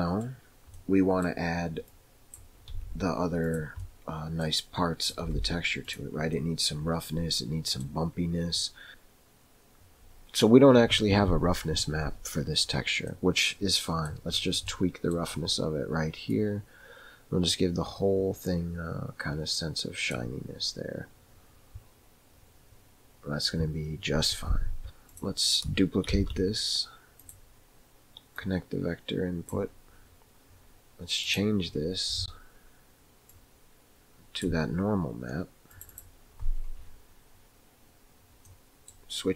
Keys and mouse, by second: 0.8 middle click, 1.9 click, 2.7 g, 3.9 middle click, 5.1 click, 5.3 g, 6.4-7.8 middle drag, 8.6 middle click, 13.5 middle click, 16.5-20.2 drag, 25.1 click, 26.4 shift+d, 28.9-30.1 drag, 31.5 click, 38.4 middle click.